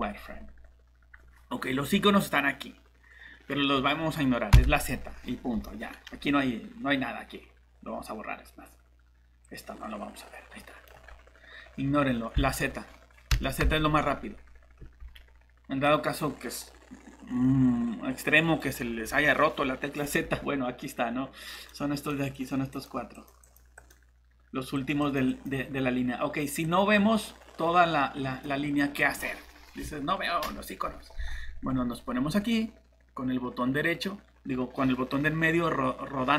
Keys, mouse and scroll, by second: 0.0-0.1 typing, 4.5 z, 5.5 Escape, 12.4 z, 13.6 z, 14.8 Escape, 33.5-34.0 scroll down 1.